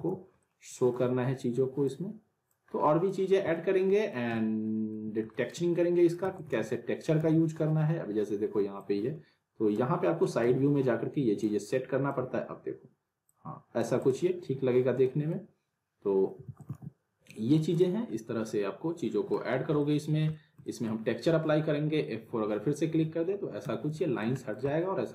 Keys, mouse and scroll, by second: 0.4-1.0 alt+middle click, 0.9-1.9 scroll down 1, 1.9-2.8 click, 2.7-3.0 scroll down 1, 3.0 click, 3.4 scroll up 1, 3.6-4.2 alt+middle click, 4.3-5.0 alt+middle click, 5.3 alt+middle click, 6.2 alt+w, 6.4 alt+right click, 6.4 alt+w, 7.2 z, 7.6 scroll down 1, 8.8-10.0 click, 9.9 scroll up 1, 10.2 middle click, 10.4 e, 11.4-12.3 click, 12.2 w, 13.3-13.9 click, 14.4 scroll down 1, 15.0 middle click, 16.4 alt+w, 16.6 alt+right click, 16.7 alt+w, 17.3 alt+middle click, 17.7 click, 18.2-19.4 middle drag, 19.5 scroll down 1, 19.8 alt+middle click, 20.6 middle click, 22.4 F4, 23.9 z, 24.0 alt+middle click, 24.4 middle click, 25.0-25.1 alt+middle drag.